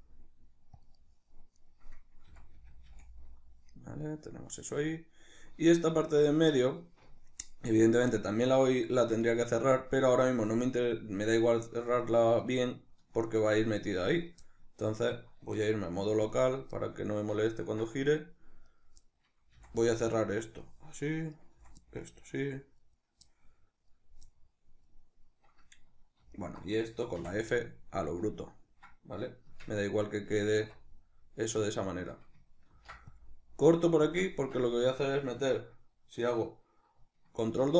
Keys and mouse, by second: 0.8 right click, 1.3 right click, 2.1 f, 2.9-18.4 middle drag, 15.2 q, 18.4 right click, 18.8-21.0 middle drag, 19.2 f, 21.0 right click, 21.3 f, 21.6-26.1 middle drag, 26.1 alt+right click, 26.9 f, 27.3-33.9 middle drag, 29.3 Tab, 30.3 Tab, 32.5 ctrl+r, 33.9 click, 34.1 Tab, 37.3 ctrl+2.